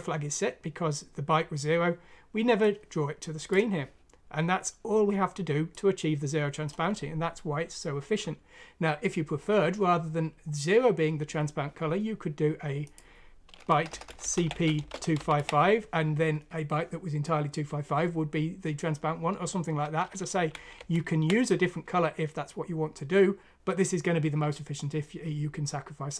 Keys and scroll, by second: 13.7-17.6 typing, 20.3 ctrl+z, 20.8 ctrl+z.